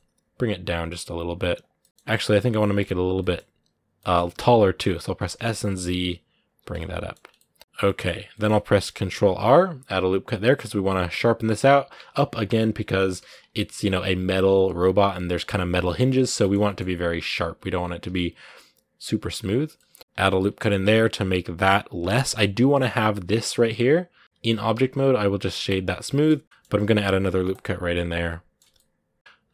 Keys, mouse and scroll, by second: 1.6 middle click, 1.9 g, 3.0-4.2 middle drag, 4.2 s, 6.5 middle click, 7.0 scroll down 1, 7.1 middle click, 7.6 Tab, 7.6 middle click, 7.8-8.2 scroll up 2, 8.2 middle click, 8.9 ctrl+r, 15.6-16.8 middle drag, 16.8 Tab, 17.3 Tab, 17.5 scroll up 1, 17.8 ctrl+r, 19.5-25.5 middle drag, 25.5 w, 25.7 middle click, 26.6 ctrl+r, 27.7 middle click, 28.4 Tab, 28.5-29.5 middle drag.